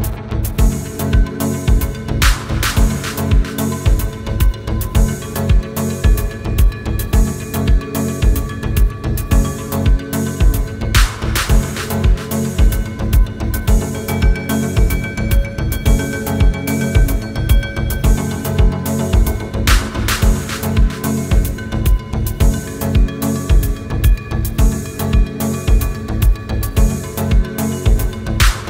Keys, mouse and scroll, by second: 0.9 scroll down 1, 1.1 middle click, 1.6 scroll down 1, 2.3 scroll up 1, 3.2 double click, 5.3 Return, 5.9 scroll up 1, 5.9 scroll down 1, 6.1 middle click, 6.5 scroll up 1, 7.3 typing, 8.4 Return, 8.6 space, 9.8 middle click, 10.4 scroll down 1, 10.5 space, 11.0 scroll up 1, 12.6 scroll up 1, 14.8 scroll down 1, 15.0 middle click, 15.8 scroll down 1, 16.2 scroll up 1, 16.8 scroll down 1, 19.7 Escape, 21.7 scroll down 1, 23.9 scroll up 1, 25.2 scroll down 1.